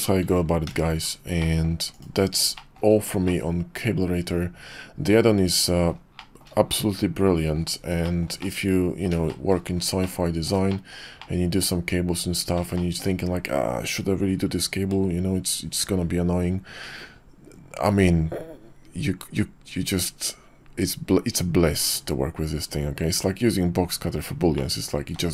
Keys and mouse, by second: 0.6 alt+h, 1.4 click, 1.9 click, 2.6 shift+middle drag, 3.2-5.9 middle drag, 6.2 shift+middle drag, 6.7-7.5 middle drag, 8.0 shift+middle drag, 8.4-9.1 middle drag, 9.3 shift+middle drag, 10.0-10.5 middle drag, 10.7 shift+middle drag, 11.2-12.5 middle drag, 12.7-13.0 shift+middle drag, 24.5-25.2 middle drag.